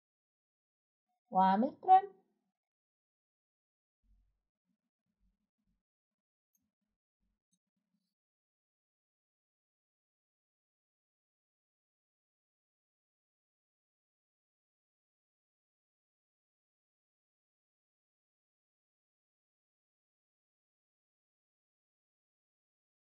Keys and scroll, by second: 0.9 typing, 16.1 Escape, 18.1 Escape, 18.2-18.6 typing, 18.4 Escape, 20.0 typing.